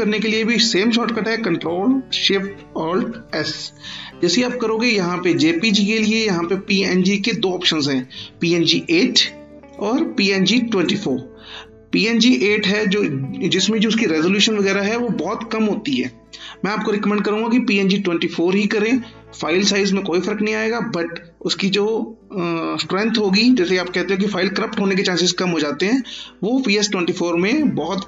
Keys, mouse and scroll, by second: 1.0 ctrl+click, 3.0 ctrl+alt+shift+s, 5.3 click, 8.7 click, 25.7 click.